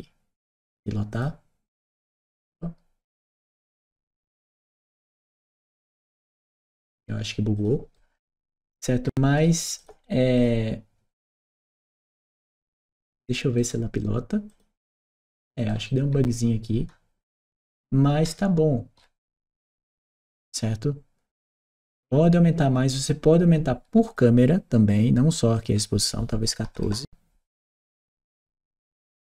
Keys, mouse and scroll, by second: 0.9 click, 2.2 right click, 3.0-4.8 drag, 5.1 right click, 6.0 click, 7.3 click, 7.7-9.2 right drag, 9.5 click, 10.1 click, 11.8-12.8 right drag, 11.9 w, 13.4 right click, 14.3 click, 15.5-16.5 right drag, 16.5 d, 19.1 w, 23.8 click, 25.4 click, 26.5 BackSpace, 27.3 1, 27.9 4, 28.4 Return.